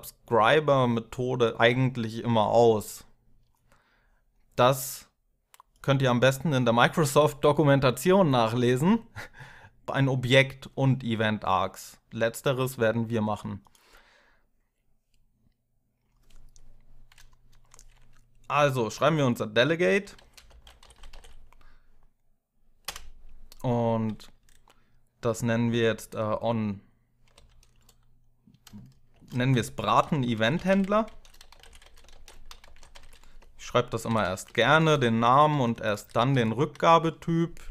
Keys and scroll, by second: 19.6-21.4 typing, 22.7 space, 27.1 o, 28.9-34.4 typing, 35.3 ctrl+Left, 35.5 ctrl+Left, 35.7 ctrl+Left.